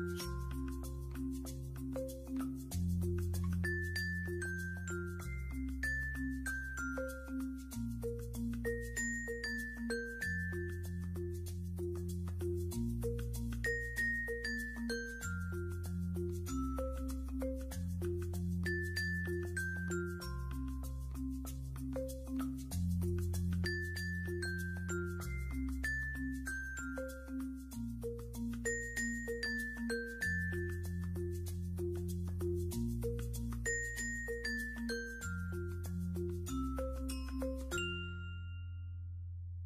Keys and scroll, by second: 1.2 typing, 9.6 alt+space, 16.0 ctrl+1, 17.6 F1, 22.9 f, 34.5 space.